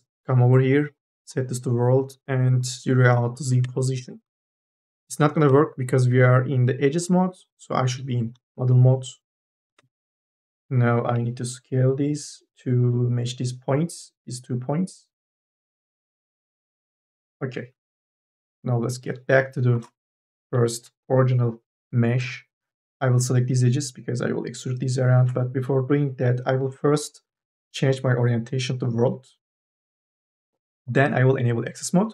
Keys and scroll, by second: 3.6 Return, 5.0 KP_0, 5.4 Return, 9.4 KP_0, 9.6 Return, 11.0 t, 18.7 1, 19.6 space, 22.7 2, 25.4 ctrl+z.